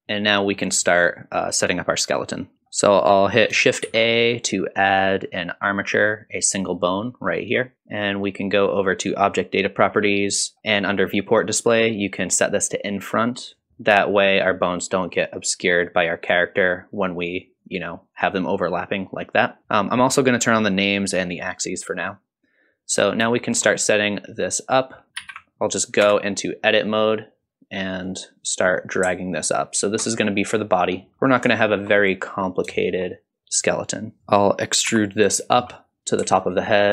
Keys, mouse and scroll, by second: 0.0 scroll down 1, 0.2-0.6 middle drag, 2.5 KP_1, 3.8 shift+a, 7.7 click, 9.3 click, 13.5 click, 15.9-16.3 drag, 17.3 click, 17.6 click, 18.1 click, 18.6 click, 20.5 click, 21.1 click, 22.9 scroll up 1, 23.4 shift+middle drag, 25.2 alt+g, 26.0 Tab, 27.0 click, 28.0-29.8 drag, 30.5 click, 30.9 scroll down 1, 31.1 click, 31.2 scroll up 2, 31.6 shift+middle click, 32.8 shift+middle click, 34.9 e.